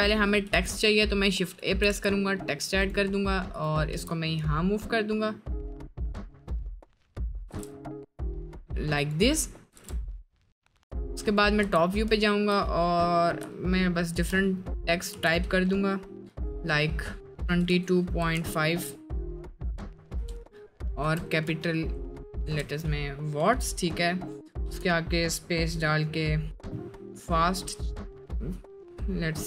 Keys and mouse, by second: 0.5 shift+a, 1.9 g, 3.9 g, 7.5 g, 9.8 g, 11.6 Tab, 12.2 shift+middle click, 13.4 BackSpace, 17.5 2, 17.7 2, 18.1 ., 18.4 5, 20.1 space, 21.0 BackSpace, 22.4 w, 24.6 space.